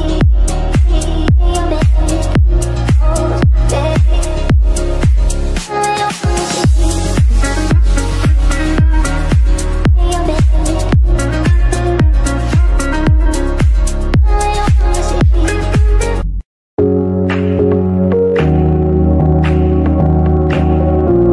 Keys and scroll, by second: 2.3 shift+F2.